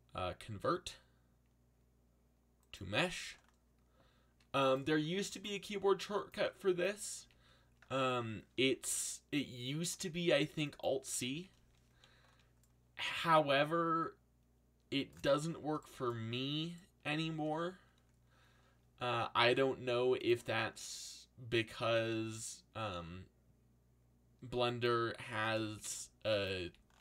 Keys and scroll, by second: 7.2 a, 8.5 c, 11.3 a, 11.9 c, 19.4 g, 20.7 g, 25.8 x, 26.6 a.